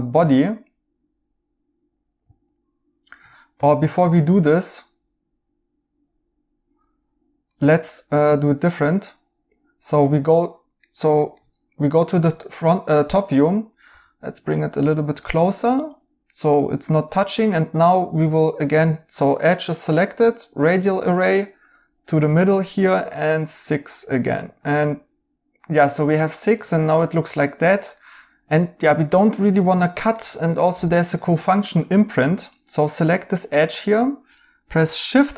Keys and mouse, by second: 3.5 ctrl+z, 3.8 right click, 7.7 right click, 10.8 right click, 13.8 g, 25.3 ctrl+z, 32.1 alt+z, 33.3 right click, 34.8 i.